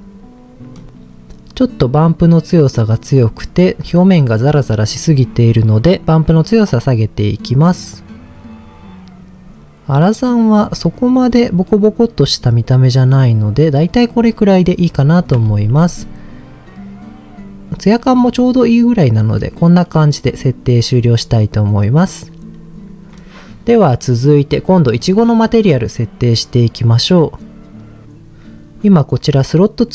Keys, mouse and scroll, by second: 0.7-1.5 scroll up 2, 1.5-1.9 scroll up 1, 1.9 click, 5.8-12.4 drag, 13.2-13.7 scroll down 2, 14.1 click, 14.1 scroll down 1, 14.5 middle click, 15.5 ctrl+s, 18.2-19.4 middle drag, 23.1-24.0 scroll down 2, 24.0 middle click, 25.0 click, 28.0 click.